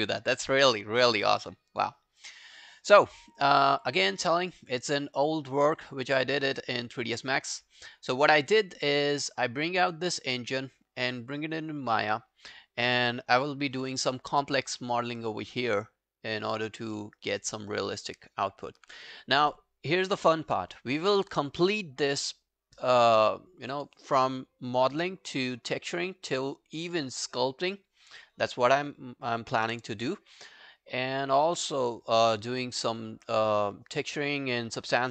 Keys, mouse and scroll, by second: 3.8 double click, 13.0 scroll up 1, 13.5 alt+click, 13.9 alt+right click, 14.2 alt+click, 14.5 alt+right click, 14.8 alt+middle click, 15.1 alt+right click, 15.3 alt+click, 17.0 alt+middle click, 17.2 alt+right click, 17.4 alt+click, 17.7 alt+right click, 18.0 alt+middle click, 18.2 alt+right click, 18.6 alt+click.